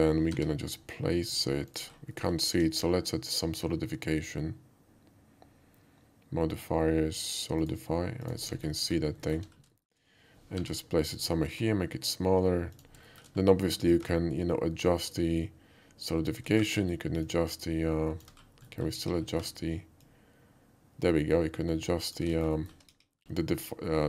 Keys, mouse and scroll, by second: 0.4 g, 1.7 click, 1.9 middle click, 2.1 middle click, 2.5 q, 7.6 click, 8.2 click, 8.6 alt+middle click, 8.9 alt+middle click, 9.3 alt+middle click, 9.5 alt+middle click, 9.8 shift+middle click, 10.6 g, 11.2 click, 11.4 s, 12.8 click, 13.1 shift+middle click, 15.1-16.4 ctrl+drag, 17.3-18.3 ctrl+drag, 18.4-18.8 ctrl+middle drag, 18.9 KP_5, 19.6 ctrl+KP_5, 20.1-22.2 ctrl+drag, 22.4 alt+middle click, 22.6 alt+middle click, 22.9 KP_5, 23.2 middle click.